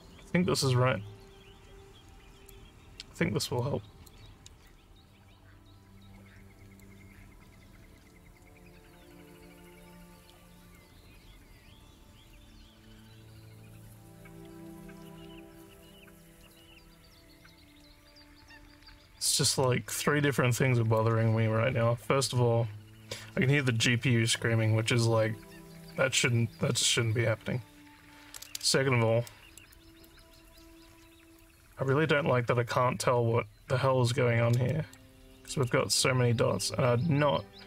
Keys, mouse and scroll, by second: 0.2-2.5 alt+drag, 3.6 alt+click, 4.7-6.8 alt+drag, 7.5 alt+click, 8.4 click, 9.9 alt+click, 11.8 click, 13.4-15.1 alt+drag, 16.8 click, 18.4 alt+click, 19.7 alt+middle click, 20.4 alt+click, 29.3 alt+middle click, 29.7 alt+click, 30.4 alt+click, 31.4 alt+click, 34.7 alt+middle click, 35.5 alt+middle click.